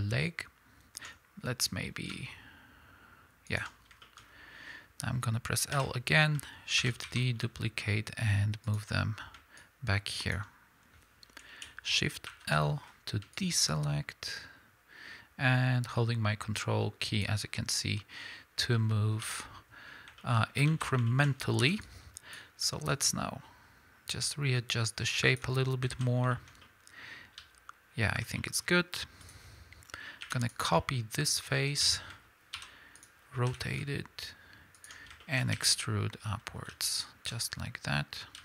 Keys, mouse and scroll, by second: 3.6 ctrl+click, 4.2 scroll up 1, 4.4-8.8 middle drag, 4.7 scroll down 1, 5.7 l, 6.8 shift+d, 8.8 ctrl+click, 9.6-20.2 drag, 12.3 shift+l, 18.6-19.3 scroll down 3, 19.3 KP_1, 20.2-22.9 shift+middle drag, 20.4 scroll up 1, 20.7 alt+a, 21.6 b, 22.9-26.3 ctrl+drag, 25.9 alt+a, 26.3-29.2 shift+middle drag, 27.4 z, 28.7-29.2 scroll up 2, 29.2 click, 30.2 3, 30.4 click, 30.8-33.0 middle drag, 31.7 KP_1, 32.6 shift+d, 33.0 click, 33.5 r, 34.8 ctrl+click, 35.2-38.4 shift+middle drag, 35.6 e.